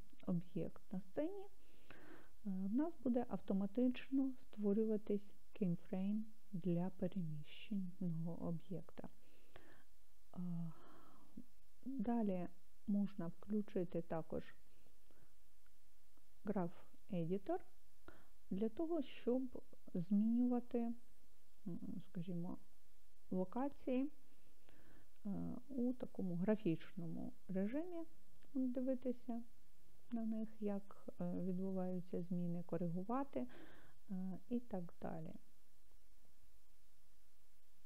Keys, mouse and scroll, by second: 12.1 click, 16.7 click, 19.2 click, 20.7-21.7 scroll down 1, 22.7 click, 24.4-25.2 scroll down 1, 25.2-25.7 scroll down 3, 27.6 click, 29.1 click, 30.0 click.